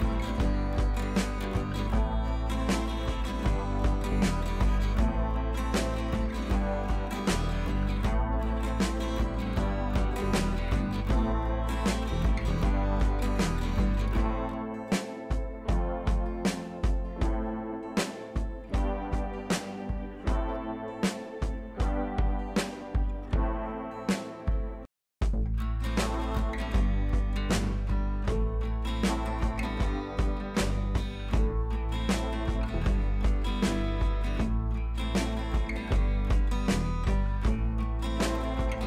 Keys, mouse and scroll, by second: 13.2-18.2 drag, 26.2-27.6 ], 28.6 click, 34.8 click, 35.6 right click, 36.0 click, 37.0 [, 37.3 click, 37.7 [, 38.2 click.